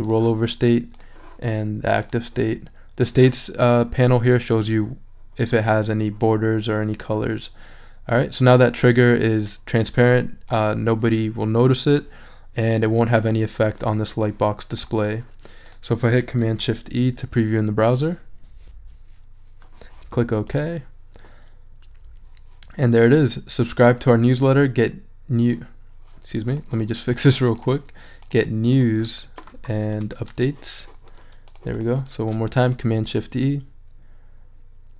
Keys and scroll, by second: 16.4 shift+super+e, 29.0 s, 29.9 BackSpace, 30.1 shift+s, 32.1 shift+super+e.